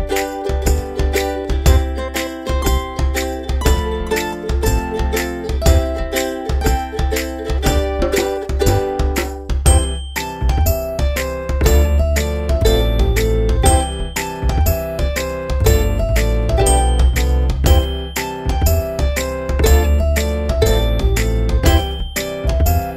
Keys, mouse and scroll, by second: 15.3 click, 16.3 click.